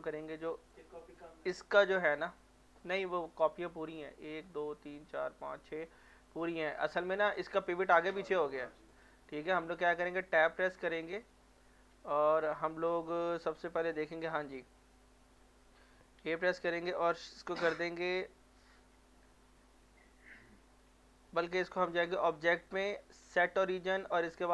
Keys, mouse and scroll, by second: 0.7 click, 1.9 middle click, 2.5 middle click, 3.8 shift+middle click, 5.9 middle click, 8.9 click, 10.0 Tab, 12.0 Tab, 13.0-14.9 middle drag, 16.2 a, 19.8 Tab, 21.8 click.